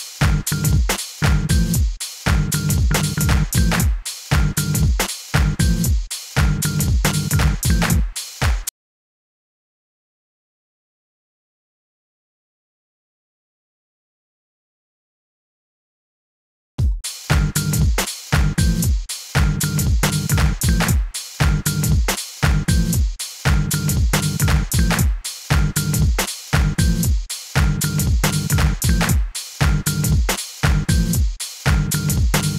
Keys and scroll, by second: 1.4 s, 4.3 a, 5.5 s, 8.6 space, 31.1 super+r, 31.6-32.5 typing.